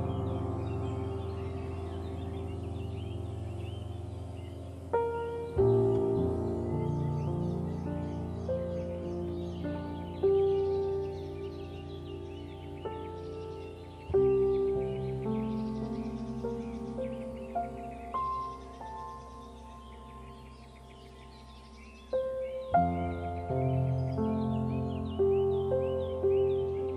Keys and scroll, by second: 14.5 ctrl+0, 26.5 ctrl+2.